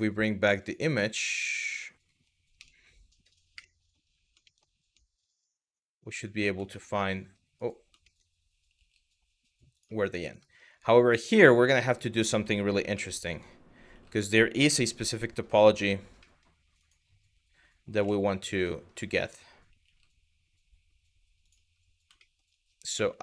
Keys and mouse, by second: 0.2 click, 2.2 KP_Divide, 3.2 KP_1, 4.1 shift+middle click, 5.6 g, 7.6 middle click, 8.4 g, 9.4 click, 10.1 shift+middle click, 10.9 shift+middle click, 11.9 middle click, 12.7 middle click, 13.5 g, 14.3 KP_1, 17.6 KP_1, 19.5 g, 21.0 click, 21.9 middle click, 22.6 q, 23.1 click.